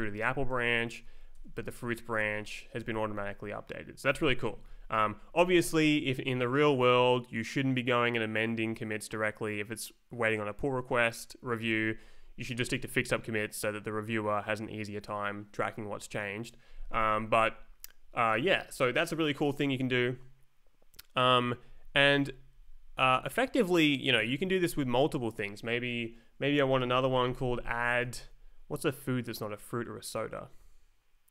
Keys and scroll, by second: 0.6 Up, 1.3 Down, 1.6 Left, 1.8 Down, 2.0 Up, 2.2 Return, 2.6 Right, 2.8 Left, 3.0 Down, 4.1 Up, 4.6 Escape, 5.0 Right, 11.9 Down, 12.1 Up, 16.9 Down, 17.5 Up, 21.4 Up, 22.2 Down, 23.5 Up, 24.3 Left, 25.9 Up, 26.8-28.0 typing.